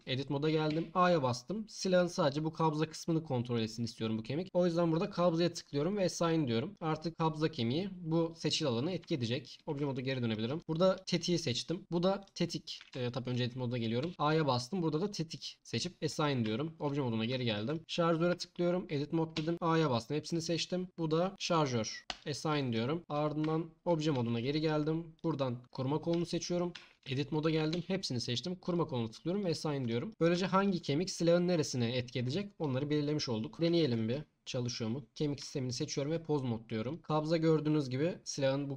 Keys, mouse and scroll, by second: 0.7 a, 5.0-6.3 drag, 9.0 Tab, 12.9 Tab, 14.0 a, 15.0-15.5 drag, 16.4 Tab, 18.3 Tab, 19.3 a, 21.4 click, 22.2 click, 23.4 Tab, 25.1 click, 26.7 Tab, 27.7 a, 29.3 click, 32.2 Tab, 35.4 Tab, 36.9 click, 37.0 g.